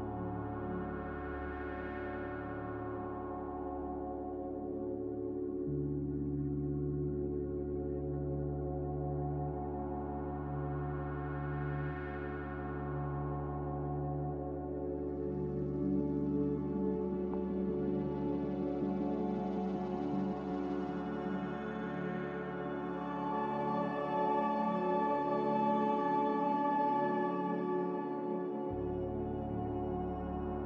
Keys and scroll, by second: 0.8 a, 11.8 z, 12.1 a.